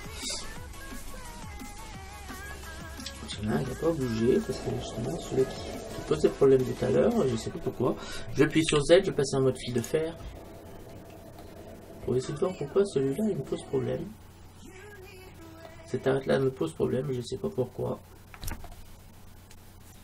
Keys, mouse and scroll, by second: 2.6-4.3 middle drag, 5.2 middle click, 5.6 middle click, 6.2-8.2 middle drag, 8.7 z, 10.7-13.5 middle drag, 16.5-18.4 middle drag.